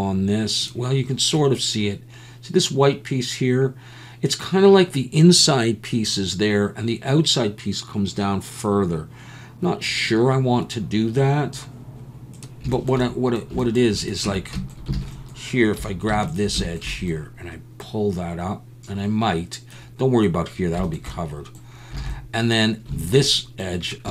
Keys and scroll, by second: 14.3 Tab, 15.0 alt+a, 15.8 2, 22.1 alt+a.